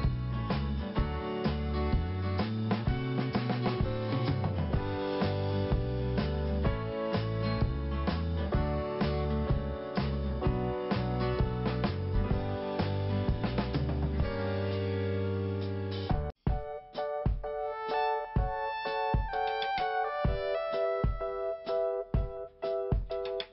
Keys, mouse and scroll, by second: 0.7 click, 1.1 click, 1.2 double click, 1.7 double click, 3.4 click, 4.7-5.0 scroll down 1, 6.1 scroll up 1, 7.4 click, 12.6 click, 16.8 click, 18.9 click, 19.9 click, 23.1 click, 23.2 click.